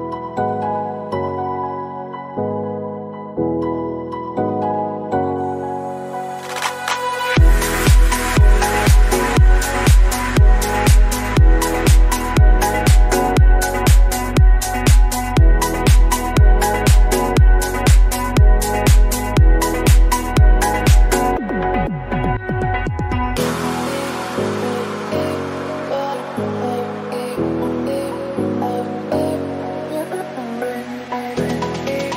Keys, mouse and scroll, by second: 2.0 /, 2.3 middle click, 2.7-3.1 scroll up 1, 3.1-3.8 scroll down 1, 3.8 scroll down 1, 4.0 middle click, 4.9 click, 5.2 middle click, 5.4-6.3 scroll up 3, 6.3 click, 10.8 click, 11.7-12.1 scroll down 2, 12.1-15.8 middle drag, 15.8 click, 16.2-16.7 scroll up 1, 16.7 middle click, 17.1-17.6 scroll down 1, 17.6-19.4 drag, 19.4 middle click, 20.2 click, 21.7 click, 22.2 click, 22.5-23.4 scroll down 2, 23.4 click, 23.6-24.0 scroll down 1, 24.0-26.2 drag, 26.2-28.1 middle drag, 28.1 click, 28.7-29.0 scroll down 1, 29.0 click, 29.3-29.6 scroll down 1, 29.6-32.1 middle drag.